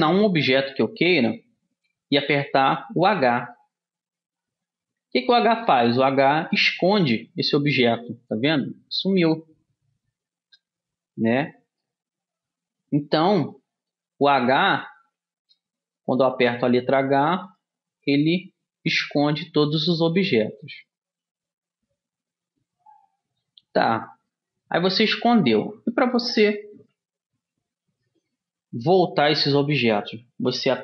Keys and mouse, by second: 0.3 middle click, 2.8 h, 6.7-10.0 middle drag, 12.0-14.0 middle drag, 14.8-16.8 drag, 16.5 h, 17.6-21.0 drag, 18.2 h, 19.5 h, 24.4-26.3 middle drag.